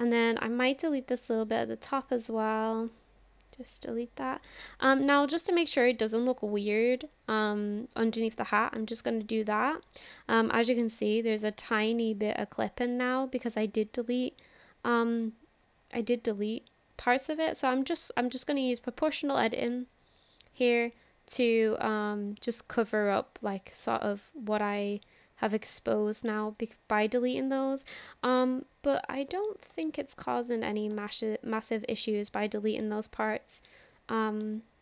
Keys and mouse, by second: 1.3 click, 2.3 ctrl+l, 3.1 Delete, 4.5 click, 6.4 click, 8.0 click, 8.5-11.1 middle drag, 11.7-16.0 middle drag, 17.0 click, 17.6-18.6 middle drag, 19.9 click, 21.8-23.6 drag, 25.3-26.5 drag, 26.6 middle click, 27.2 click, 27.3 click, 28.0-29.0 middle drag, 29.0 click, 29.9 shift+middle click, 30.3 middle click, 31.1 shift+middle click, 33.0 click, 34.6 shift+middle click.